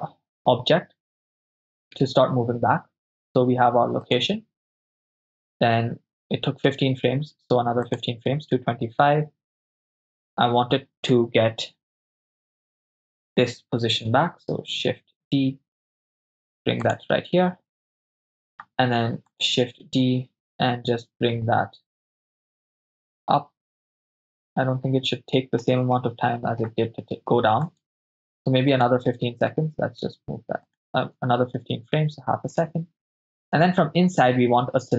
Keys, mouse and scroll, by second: 8.0 click, 12.7 right click, 14.9 shift+d, 16.9-17.8 drag, 18.0 ctrl+middle click, 19.3 right click, 20.3 shift+d, 23.9 click, 24.4-25.6 ctrl+middle drag, 26.0 shift+middle click, 27.7 right click, 28.7 right click, 29.5 g, 30.7-31.3 drag, 31.3 shift+space, 33.5 drag.